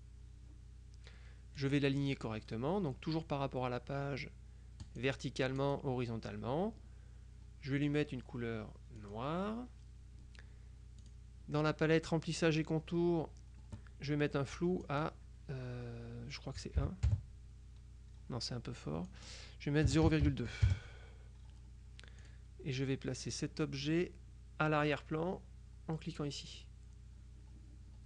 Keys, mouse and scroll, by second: 1.7 click, 4.9 click, 5.7 click, 9.1 click, 11.1 click, 14.9 click, 16.8 KP_1, 17.1 KP_Enter, 19.2 click, 19.9 KP_0, 20.1 KP_Decimal, 20.3 KP_2, 20.7 KP_Enter, 22.3 click, 23.3 click, 26.5 click.